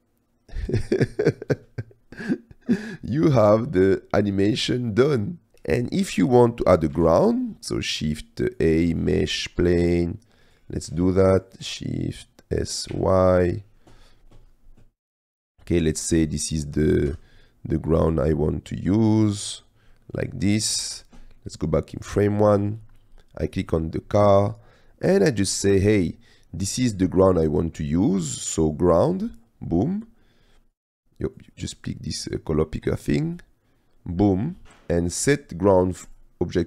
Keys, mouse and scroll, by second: 1.6 space, 2.2-2.8 drag, 3.0 middle click, 4.0-4.4 shift+middle drag, 4.8-5.5 drag, 6.0 click, 7.0 shift+a, 9.7 s, 11.2 click, 11.8 s, 12.9 y, 16.5 middle click, 17.1 g, 18.0 c, 20.0 middle click, 21.7-22.1 drag, 23.6 click, 29.6-30.9 drag, 31.5 click.